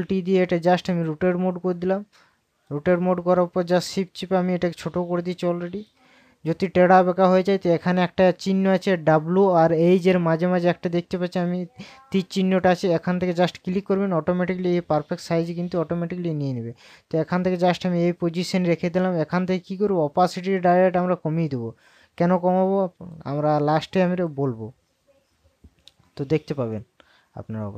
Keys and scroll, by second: 0.9 ctrl+t.